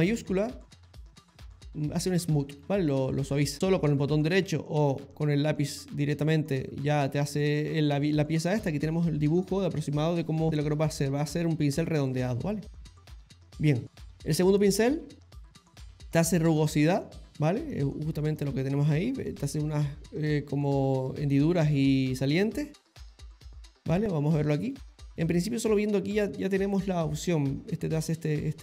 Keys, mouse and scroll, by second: 0.3 shift+click, 2.6 ctrl+z, 3.0 ctrl+z, 3.5 click, 5.0 click, 13.1 ctrl+z, 13.4 ctrl+z, 14.6 click, 17.0 click, 23.5 ctrl+z, 25.2 click.